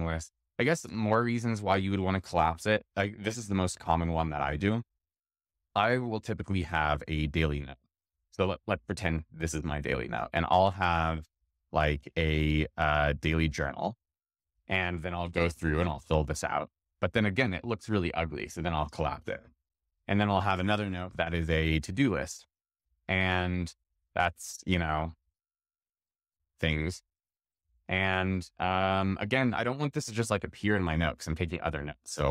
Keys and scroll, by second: 25.2 super+Return.